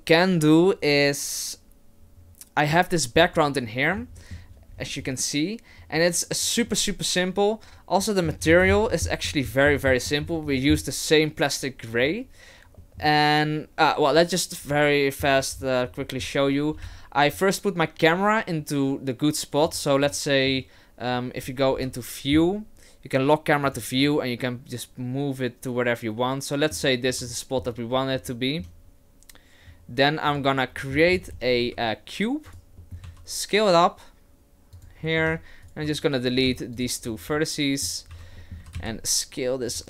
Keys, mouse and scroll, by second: 15.5-16.0 scroll down 6, 16.0 middle click, 16.7 KP_0, 16.8 Right, 19.7 click, 20.1 middle click, 21.8 KP_1, 21.8 KP_0, 23.7 click, 24.0 middle click, 27.3 shift+middle click, 27.8-28.1 scroll up 1, 28.3 shift+middle click, 28.9-30.2 scroll up 1, 30.3 click, 30.8 middle click, 31.1-31.5 scroll down 9, 31.6 shift+a, 32.8 middle click, 33.0 s, 35.1 middle click, 35.3 Tab, 35.6 right click, 35.9 shift+right click, 36.4 x, 37.0-38.1 scroll up 3, 37.3 middle click, 38.1 a, 38.4 middle click, 38.6 s.